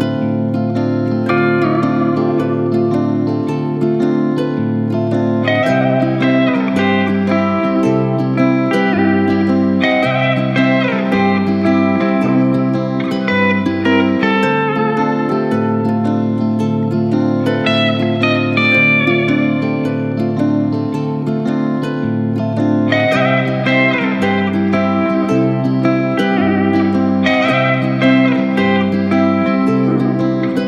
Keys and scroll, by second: 3.3 ctrl+z, 11.0 ctrl+shift+s, 11.3 ctrl+z, 11.5 ctrl+z, 14.1 shift+=, 15.3 shift+=, 15.8 BackSpace, 15.9 BackSpace, 19.2 ctrl+z, 25.9 ctrl+z, 27.7 Return, 28.7 Return.